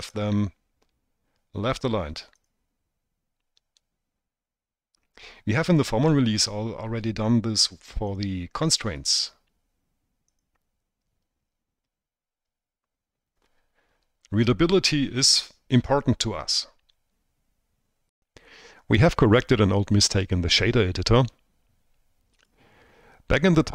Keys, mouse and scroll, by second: 3.1 click, 9.0 click, 9.7-11.3 drag.